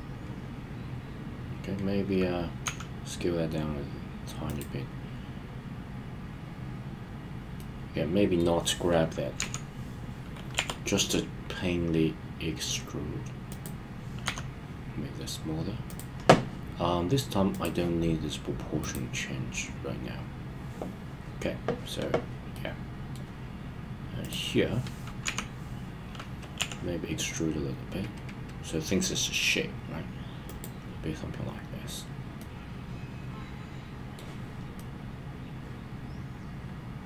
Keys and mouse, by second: 2.6 s, 4.5 click, 7.6-8.4 middle drag, 9.4 KP_1, 10.6 e, 13.5 click, 14.2 s, 15.9 click, 17.5 click, 22.5-23.2 middle drag, 25.2 KP_1, 26.6 e, 30.5 click, 32.4-34.2 middle drag, 34.8-37.0 middle drag.